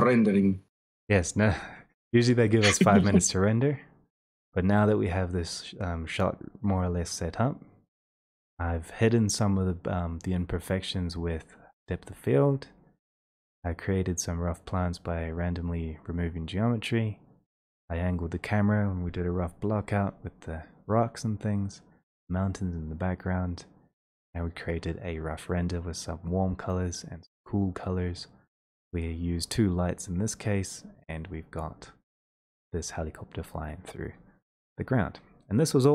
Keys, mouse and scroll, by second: 0.8 click, 5.2 middle click, 14.5 middle click, 15.8 middle click, 17.4-17.9 scroll.